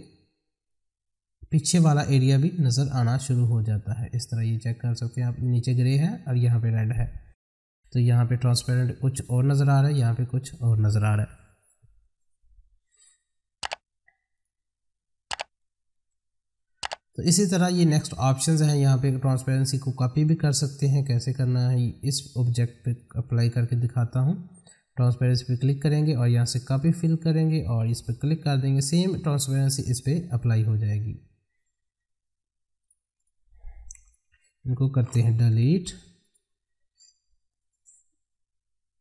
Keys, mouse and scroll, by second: 4.7 middle click, 5.2-7.0 scroll up 1, 20.7-23.0 drag, 25.3 click, 32.8 click, 35.6 F4, 36.2 click.